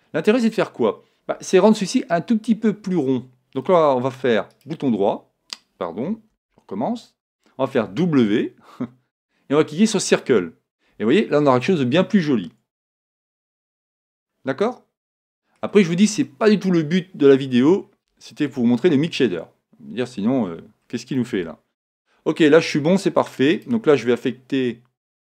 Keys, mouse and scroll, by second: 6.1 super+right click, 6.3 super+z, 7.9 w, 13.0 Tab, 13.3-15.6 middle drag, 15.8-16.2 scroll down 1, 16.2-18.2 middle drag, 18.5 KP_1, 20.2-21.4 scroll down 1, 21.4 scroll down 1, 21.4 KP_0, 21.5 middle click, 25.1 right click.